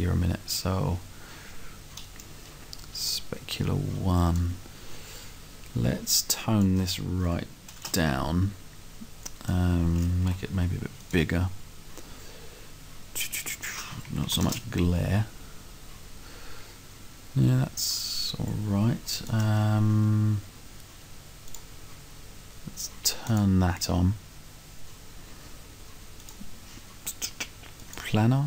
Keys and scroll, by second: 4.6 Right, 7.2 1, 7.5 0, 7.8 Return, 10.2 5, 10.6 0, 14.1 1, 14.3 0, 19.6 Right.